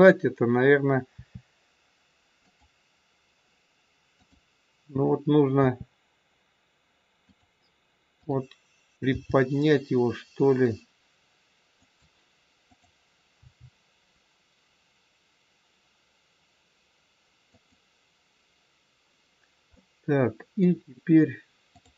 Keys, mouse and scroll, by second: 1.0 r, 4.2 click, 5.5 r, 8.1 click, 9.0 g, 12.6 click, 13.5 g, 19.8 middle click, 21.7 click.